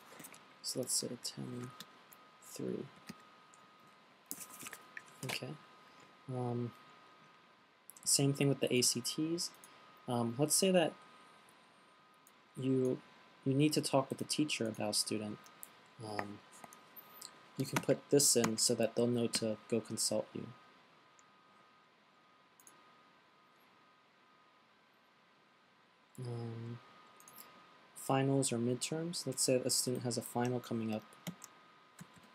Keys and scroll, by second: 1.8-3.4 typing, 14.5 fn+Delete, 18.2-19.4 typing, 21.8-22.5 typing, 30.2 fn+Delete, 31.4 shift+fn+Delete, 31.7-32.3 typing.